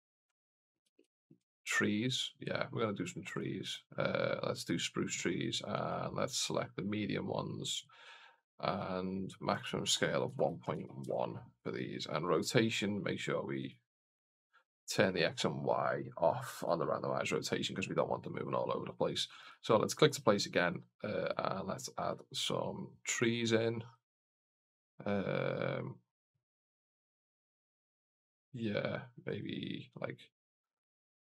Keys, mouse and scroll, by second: 1.9 click, 3.1-4.6 drag, 5.7-6.8 drag, 9.4-11.6 drag, 12.1 click, 12.4 scroll down 1, 13.4 click, 13.4 scroll down 1, 13.9 click, 14.2 click, 14.4 click, 16.4 click, 19.2 click, 20.5 click, 21.1 click, 21.8 click, 22.9 click, 23.8 click, 28.1 click, 29.1 click, 30.8 click.